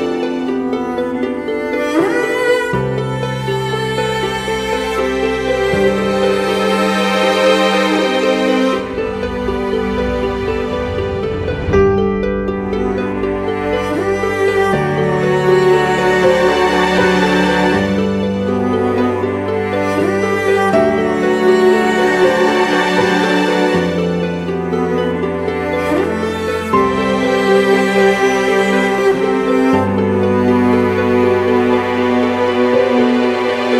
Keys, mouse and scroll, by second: 0.7-1.7 typing, 4.1-4.8 typing, 8.0-8.8 scroll up 1, 8.9 typing, 30.7 ctrl+t.